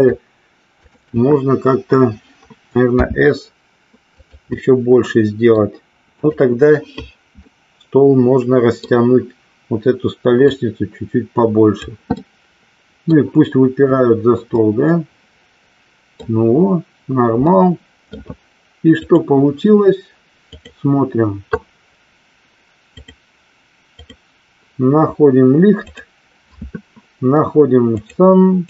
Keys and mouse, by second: 0.0 shift+click, 1.0 shift+click, 4.7-5.8 middle drag, 6.3 click, 7.7-9.0 middle drag, 10.5-12.0 drag, 12.3-13.4 middle drag, 14.8-16.4 middle drag, 17.7 middle click, 19.4 click, 23.2 click, 25.9 click, 28.2 click.